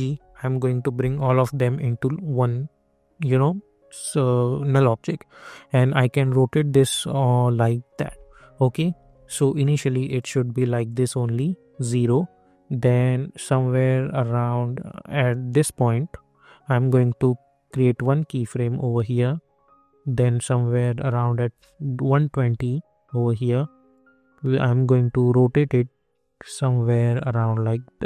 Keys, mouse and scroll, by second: 0.0 alt+g, 5.5-8.9 drag, 8.9 ctrl+z, 10.1 click, 13.3-28.0 drag.